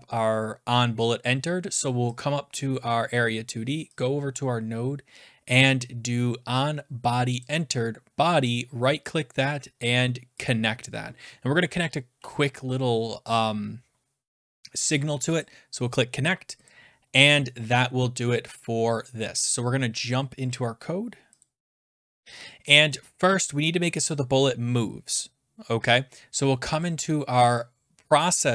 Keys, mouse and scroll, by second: 2.2 click, 4.0 click, 7.4 click, 8.5 right click, 10.5 click, 15.4 click, 16.7 click, 21.4 click, 21.8 click, 21.8 scroll down 7, 24.6-25.0 scroll, 26.8 click.